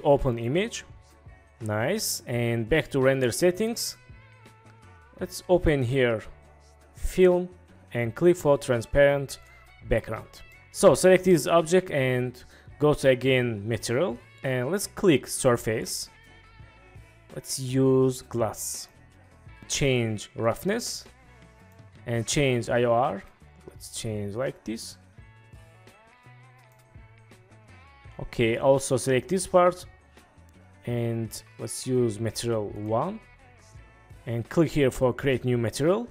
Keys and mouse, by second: 3.2 click, 9.5 click, 13.9 click, 15.5-19.0 drag, 20.5-21.9 drag, 23.4-26.8 drag, 29.0 click, 31.8-33.0 drag, 35.4 click.